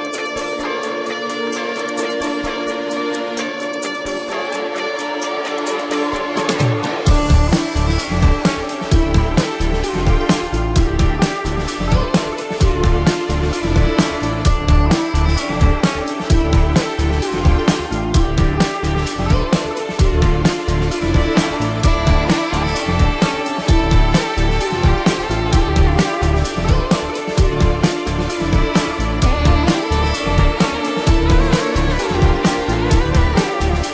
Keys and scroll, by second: 1.4 ctrl+-, 2.2 ctrl+-, 4.3 ctrl+alt+z, 5.6 ctrl+alt+z, 6.4 ctrl+-, 8.3 ctrl+alt+z, 10.7 ctrl+-, 12.3 ctrl+alt+z, 14.8 ctrl+alt+z, 15.6 ctrl+-, 16.1 ctrl+-, 18.2 space, 21.9 ctrl+alt+z.